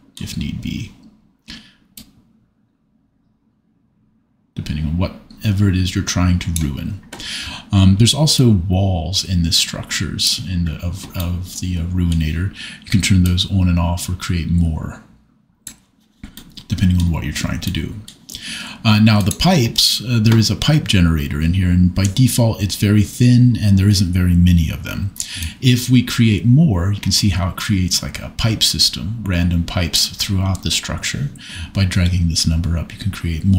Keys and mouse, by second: 2.0-6.6 drag, 8.4-10.4 drag, 13.3-15.8 drag, 19.2 click, 25.6-29.9 drag.